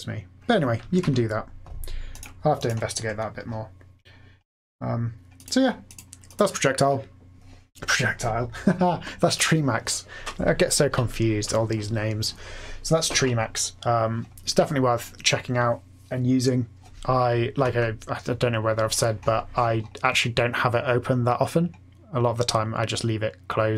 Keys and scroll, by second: 0.9 super+f, 1.0 typing, 3.0 typing, 17.6 F8.